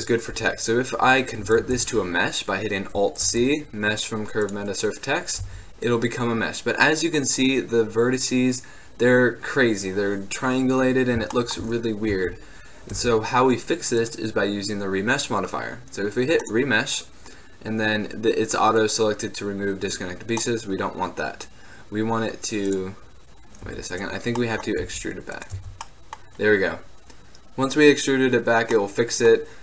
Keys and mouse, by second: 1.7 alt+c, 3.3 alt+c, 5.0 click, 5.5 Tab, 12.2 a, 13.1 Tab, 16.3-20.5 middle drag, 23.8 Tab, 24.9 e, 25.7 Tab, 26.9 Tab.